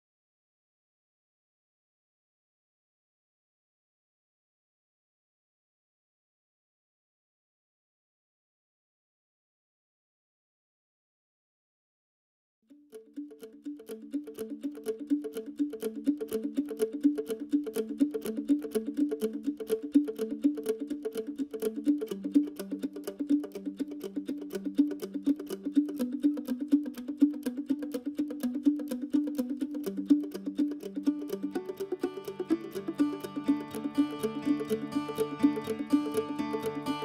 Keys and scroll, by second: 4.0 q, 5.1 Escape, 7.8-11.0 typing.